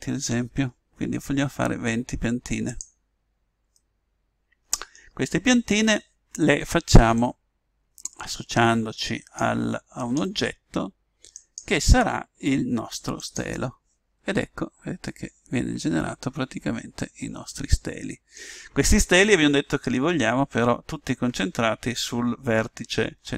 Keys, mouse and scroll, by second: 3.0-5.6 middle drag, 7.1 click, 9.9-13.2 drag, 14.5-17.0 middle drag.